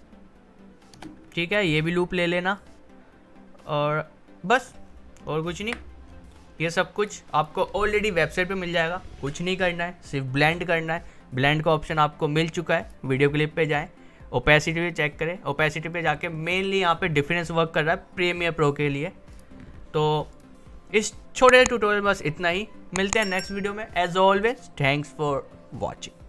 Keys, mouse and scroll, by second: 1.3 alt+scroll down 1, 1.6-2.6 scroll up 1, 2.6-4.8 drag, 4.8-5.2 alt+scroll up 1, 5.8 scroll up 1, 6.6 click, 12.8 click, 15.9 click, 19.3 click.